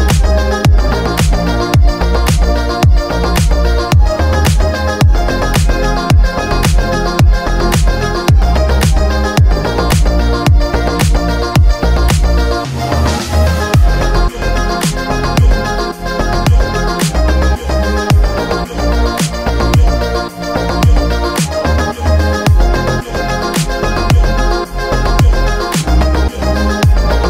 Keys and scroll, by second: 6.4 KP_Add, 24.4 Delete.